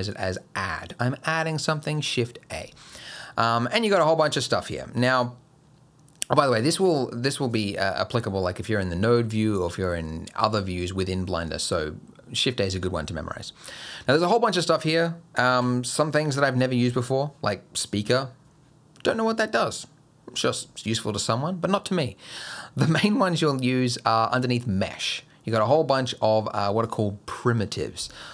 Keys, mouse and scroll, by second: 15.5 shift+a.